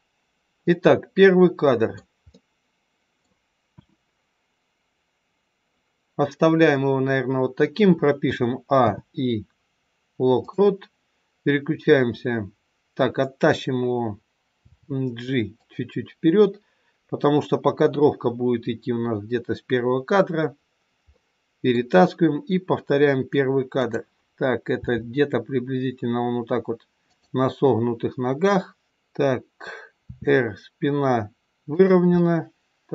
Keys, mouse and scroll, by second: 0.2-0.6 scroll down 2, 0.6 middle click, 3.6 KP_1, 8.1 a, 8.7 i, 14.6 g, 20.5-21.2 scroll up 3, 21.0 middle click, 23.7 click, 24.7 g, 28.9 middle click, 30.1 r, 32.2 middle click.